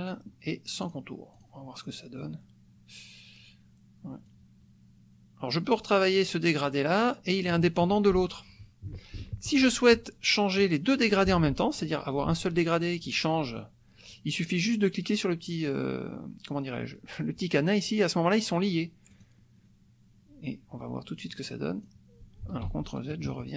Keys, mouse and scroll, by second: 0.8 click, 1.3 click, 4.2-7.6 drag, 19.1 click, 21.3 click, 22.7 ctrl+z.